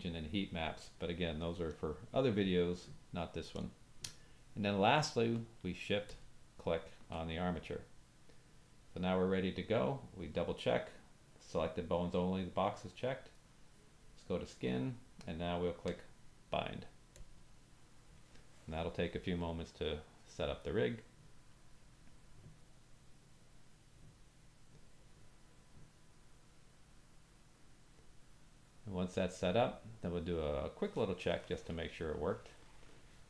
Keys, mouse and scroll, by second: 6.1 shift+click, 17.1-33.2 drag.